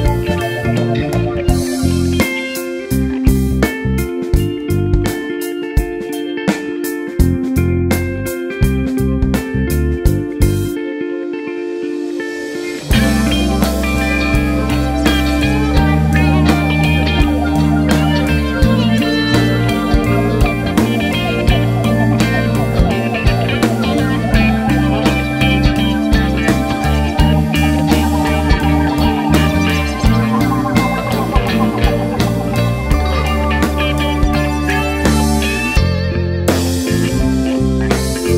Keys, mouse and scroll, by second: 0.0 KP_3, 0.2-0.6 scroll up 2, 1.4-2.6 scroll down 4, 1.5 KP_7, 2.6-3.2 scroll down 1, 3.2-4.0 scroll up 2, 4.0-5.0 scroll down 2, 5.0 Tab, 5.2 scroll up 1, 5.3 `, 6.3 KP_1, 6.7 scroll up 1, 7.0 Tab, 9.4 Tab, 9.5 `, 9.8 scroll down 1, 10.0 Tab, 10.2 `, 10.6 ctrl+z, 11.3 KP_1, 11.9 scroll up 1, 12.3 s, 14.4 right click, 14.5 s, 15.3 `, 15.6 scroll down 1, 15.9 alt+a, 16.0 `, 17.8 scroll up 1, 18.0 `, 19.0 ctrl+r, 19.8 3, 20.2 alt+click, 20.3 `, 20.6 scroll up 2, 20.8 `, 21.6 n, 22.8 scroll up 2, 23.0 scroll down 2, 23.2 `, 23.4 scroll up 2, 23.6 `, 24.2 click, 25.2 `, 25.8 ctrl+z, 27.0 click, 28.3 3, 28.6 alt+click, 28.9 click, 31.0 Tab, 31.9 Tab, 32.3 KP_7, 32.8-33.2 scroll up 1, 34.6 click, 35.6 ctrl+click, 36.0 KP_7, 36.4-37.0 scroll up 1, 37.0 g, 37.8 scroll down 1, 38.1 `.